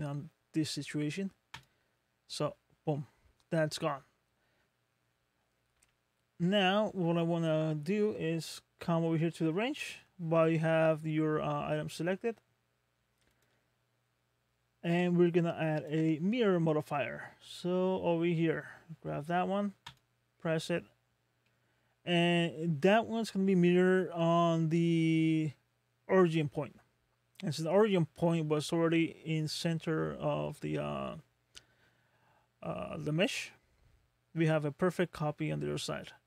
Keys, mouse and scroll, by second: 2.5-2.8 scroll down 2, 2.9 middle click, 5.8 Tab, 6.4 middle click, 13.3 click, 15.8 click, 21.1 scroll down 2, 21.4 middle click, 22.0 scroll up 2, 22.7 scroll up 1, 24.2-27.3 scroll up 4, 27.3-27.9 scroll down 4, 30.5 middle click, 34.5 middle click.